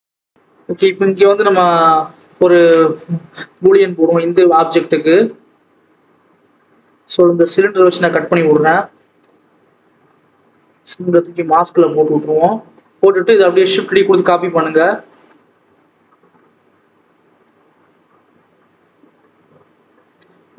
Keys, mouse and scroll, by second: 0.1 Tab, 0.2 click, 3.5-5.3 drag, 6.8 click, 7.8-8.4 scroll up 1, 8.4 scroll down 1, 8.7-9.5 scroll up 1, 9.7 scroll down 5, 10.0 click, 11.0 click, 13.3 click, 13.7 shift+d, 16.3 click, 18.5 alt+a, 18.8 click, 19.5 click.